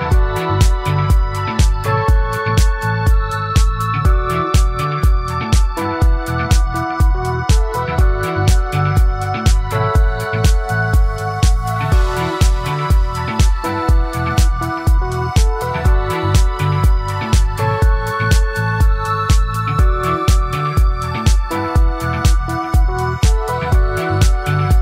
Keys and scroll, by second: 10.3 ctrl+z.